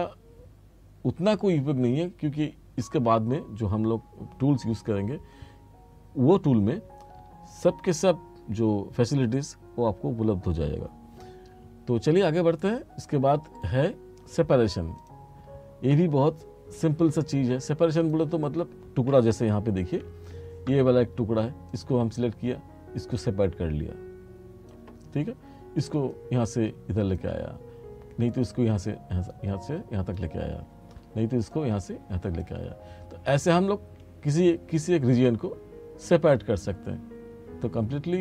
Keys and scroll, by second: 20.0 r.